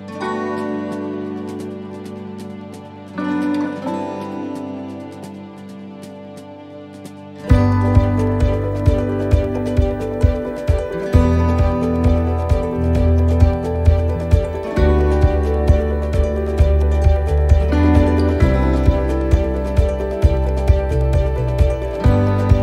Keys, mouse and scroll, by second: 0.8 click, 5.1 right click, 6.9 click, 7.9 click, 17.9 scroll down 2, 18.3 middle click, 19.3 shift+right click, 20.5 right click, 21.0 shift+right click.